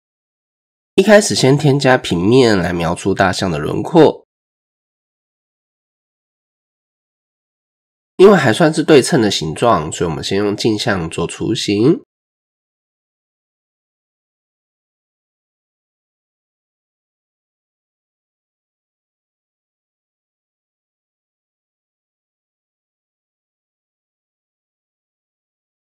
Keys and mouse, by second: 1.8 shift+a, 4.7 click, 6.1 ctrl+4, 6.5 Tab, 7.3-7.6 shift+drag, 9.2 click, 11.8 click, 12.7-14.8 drag, 15.5 click, 18.4-20.0 drag, 20.6 Tab, 21.1 ctrl+a, 22.4 Tab, 23.2 shift+drag, 24.0 s.